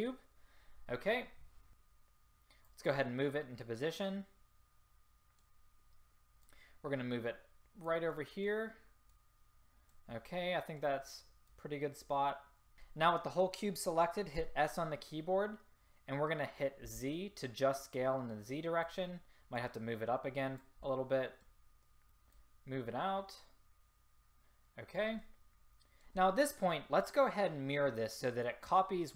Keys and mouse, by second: 6.5-8.2 drag, 9.2 middle click, 10.5-12.5 middle drag, 12.5 click, 14.5 s, 19.7-20.9 drag, 20.9-22.5 middle drag.